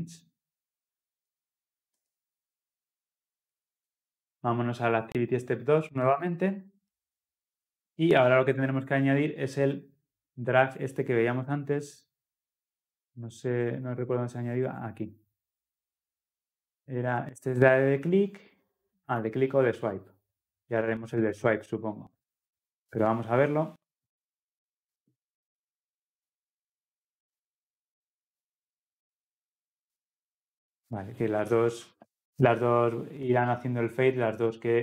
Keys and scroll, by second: 1.9 ctrl+v, 4.9 ctrl+s.